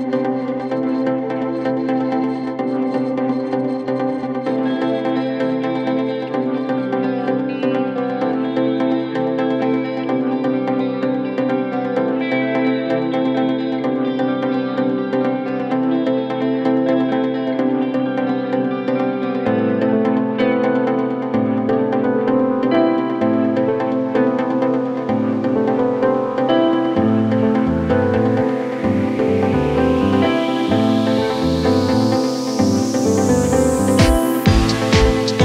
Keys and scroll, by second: 11.1 ctrl+d, 11.2 Escape, 13.3 ', 13.6 ], 16.1 b, 16.2 o, 16.4 y, 16.5 Return, 17.4 4, 22.2 2, 30.5 4, 33.0 3, 33.8 ctrl+d, 33.9 Escape.